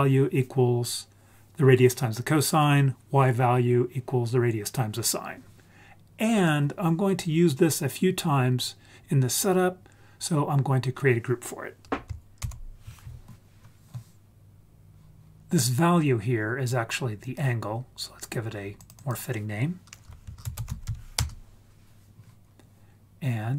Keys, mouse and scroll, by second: 6.3 click, 12.4 ctrl+g, 17.2 click, 19.0-21.2 drag.